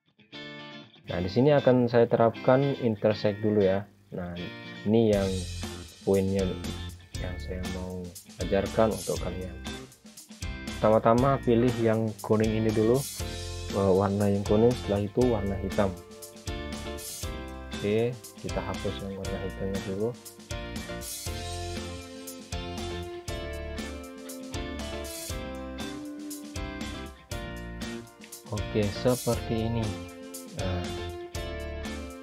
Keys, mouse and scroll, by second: 1.7 click, 4.3 ctrl+z, 7.0 click, 9.0 ctrl+z, 10.7 click, 13.2 shift+click, 17.2 click, 19.6 click, 24.3 right click, 25.5 click, 27.6 right click, 29.7 click.